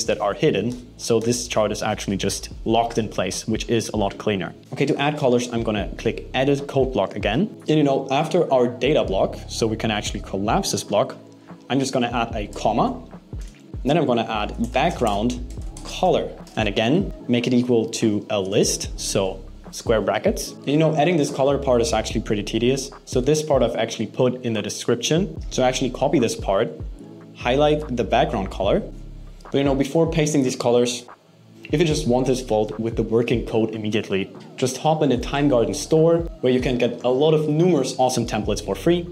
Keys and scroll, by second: 13.7 BackSpace, 16.4 shift+space, 17.3 alt+7, 17.7 BackSpace, 18.2 alt+5, 25.3 super+c.